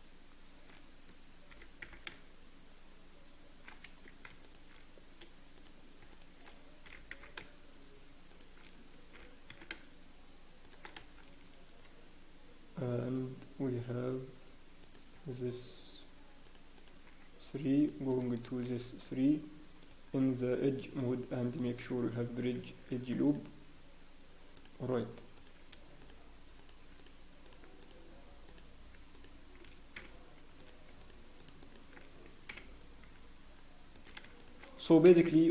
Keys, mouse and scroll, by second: 0.6 click, 1.5 g, 4.7 shift+click, 5.5 click, 6.1 shift+click, 6.8 g, 9.1 g, 16.5 shift+click, 17.8 shift+click, 19.8 click, 20.3 right click, 22.9 ctrl+r, 25.3 click, 29.9 f, 30.5 click, 31.0 shift+click, 31.9 shift+click, 32.5 f, 33.9 click, 34.4 shift+click, 35.0 f.